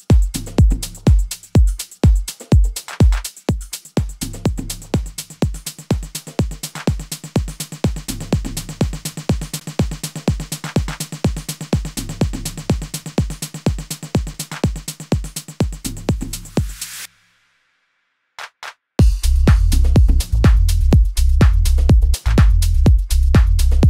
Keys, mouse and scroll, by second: 9.5 alt+F8, 9.5 right click, 9.8 F9, 14.2 F1, 14.2-15.6 right drag, 16.0 right click, 17.3 shift+Return, 17.6-19.4 right drag, 19.7 right click, 23.0 right click.